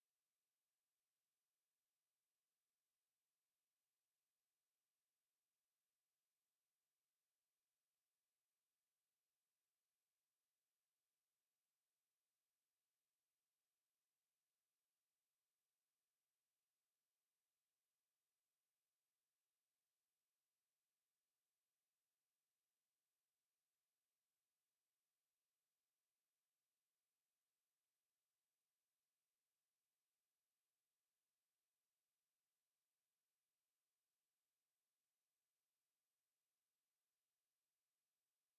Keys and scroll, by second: 5.8 6.